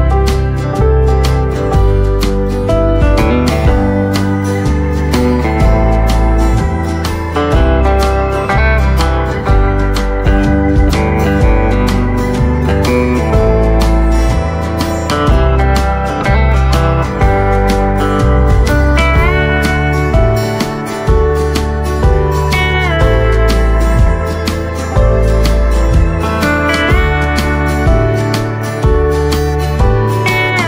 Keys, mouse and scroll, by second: 0.5 click, 1.3 ctrl+z, 2.1 click, 3.0-4.8 typing, 4.3 right click, 5.6 click, 6.9 right click, 10.1 space, 10.4 click, 11.5 right click, 14.6 scroll down 1, 15.1 right click, 16.2-16.6 scroll up 1, 16.9 click, 17.5-17.9 scroll down 1, 17.9 right click, 19.2 click, 19.6 right click, 20.1-20.6 scroll down 1, 21.0 right click, 21.5-22.0 scroll up 1, 22.4 click, 29.9 shift+click, 30.2 typing.